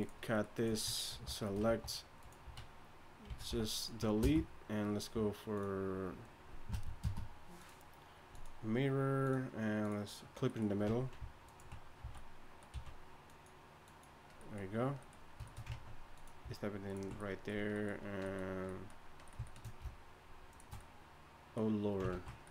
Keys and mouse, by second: 0.5 click, 1.1 ctrl+l, 1.7-4.2 typing, 4.0 Tab, 7.0 space, 10.9 Tab, 12.0 z, 12.7 z, 15.7 ctrl+Tab, 22.1 ctrl+x.